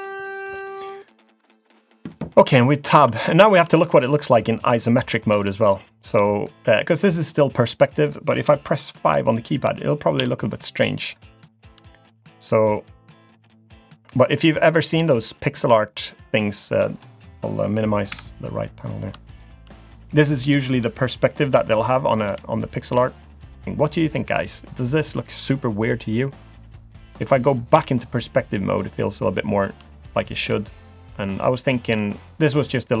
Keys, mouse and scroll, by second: 3.0 Tab, 3.2 middle click, 3.8 shift+middle click, 4.5 middle click, 5.0 scroll down 1, 5.4 shift+middle click, 5.7 scroll up 1, 6.1-6.8 scroll down 1, 10.2 KP_5, 11.4-11.9 scroll up 4, 11.9 shift+middle click, 13.0 click, 14.3-14.6 scroll down 2, 14.6-15.0 scroll up 1, 15.8-16.1 scroll up 1, 18.1 n, 19.1 scroll down 1, 19.3 shift+middle click, 19.8-20.2 scroll up 1, 22.6 shift+middle click, 27.7 KP_5, 28.8 scroll down 4, 29.4 shift+middle click, 30.0 middle click, 30.5 scroll up 1, 31.0 click, 31.4-32.0 scroll up 1, 32.0-33.0 scroll down 3, 32.2-33.0 scroll up 1.